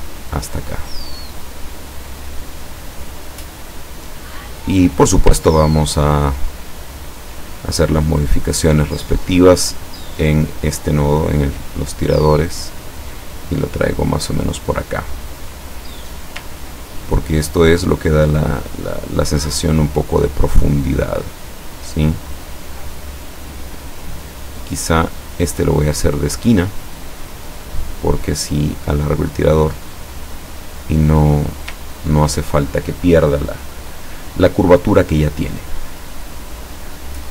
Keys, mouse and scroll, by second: 2.7 click, 3.2 click, 4.9 click, 5.7-6.2 ctrl+scroll up 1, 7.3 click, 8.1 click, 9.1 click, 9.9 click, 11.1-12.3 drag, 12.9-16.3 drag, 16.9-17.3 ctrl+scroll down 2, 18.7 click, 19.4 click, 20.4 click, 21.1-23.4 drag, 25.3 click, 26.9 click, 28.4-30.4 drag, 31.4 click, 31.9-32.2 ctrl+scroll down 2.